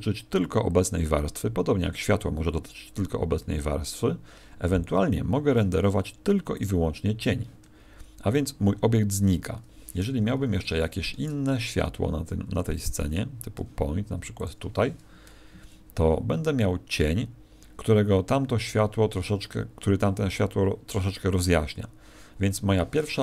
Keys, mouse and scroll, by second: 10.2 Escape, 11.0 shift+a, 13.5 g, 14.4 click.